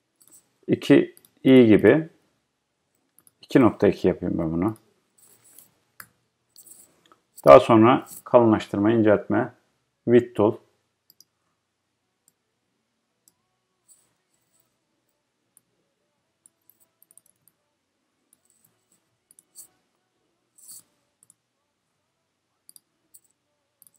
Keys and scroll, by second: 6.2 Return.